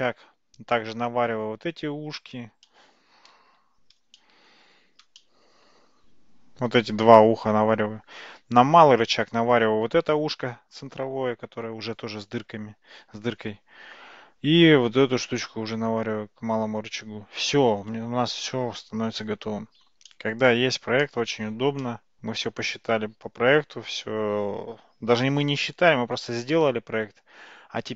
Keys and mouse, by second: 2.7-3.3 middle drag, 4.2-4.5 shift+middle drag, 5.2-5.7 shift+middle drag, 20.1-20.6 shift+middle drag, 21.1-21.7 shift+middle drag, 21.9-27.9 middle drag.